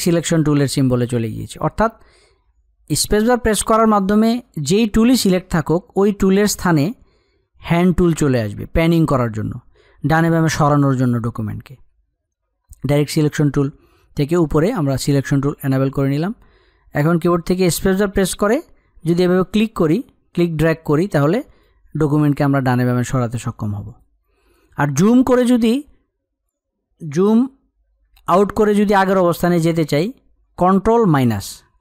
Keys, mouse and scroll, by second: 21.6 click.